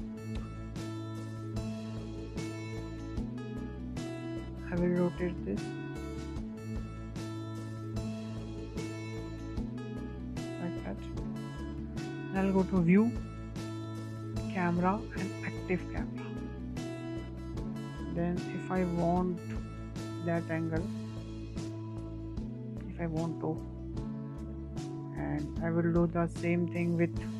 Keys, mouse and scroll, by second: 0.0 click, 0.8-1.1 scroll up 4, 1.1-1.4 shift+middle drag, 1.4-1.8 scroll up 4, 1.8-2.6 shift+middle drag, 2.6 click, 3.1-4.6 middle drag, 4.6-5.9 drag, 7.5 scroll down 1, 7.6 scroll up 1, 7.7-10.7 middle drag, 10.7 click, 11.7-13.4 shift+middle drag, 13.4-16.4 drag, 17.9-27.3 shift+middle drag.